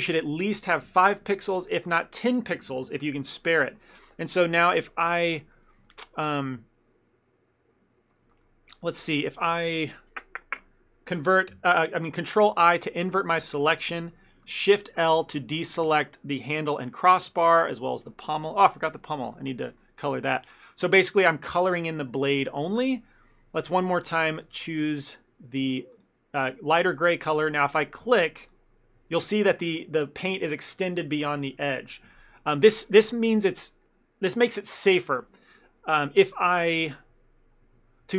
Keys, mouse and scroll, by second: 0.2 click, 4.4 middle click, 4.7 ctrl+middle click, 5.6 shift+middle click, 5.9 ctrl+middle click, 11.6 ctrl+i, 13.3 shift+middle click, 15.2 shift+l, 15.9 shift+l, 16.4 scroll down 1, 17.2 shift+middle click, 18.3 shift+l, 19.4 shift+middle click, 24.1 click, 28.5 click, 32.5-35.8 scroll down 1.